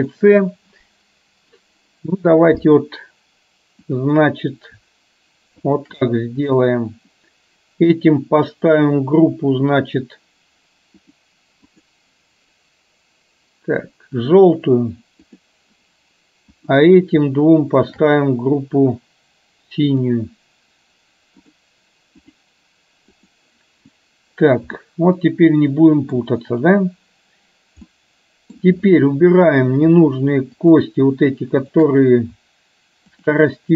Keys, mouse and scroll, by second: 4.1 click, 5.7 shift+click, 8.8 click, 11.0 click, 12.0-14.6 drag, 15.3 click, 16.8 drag, 18.0 shift+click, 20.1 click, 21.5-22.6 drag, 23.2 click, 25.0-26.2 middle drag, 28.0-28.6 middle drag, 29.6 click, 31.7 shift+click, 33.2 shift+click.